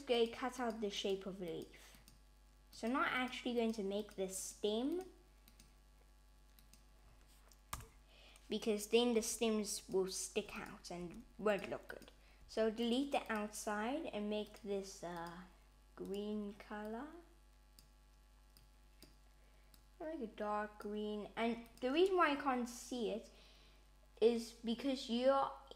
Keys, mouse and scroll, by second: 9.2 3, 9.8 click, 10.6 click, 11.0 x, 11.9 click, 12.4 x, 13.2 click, 14.5 click, 16.0 click, 21.7 click.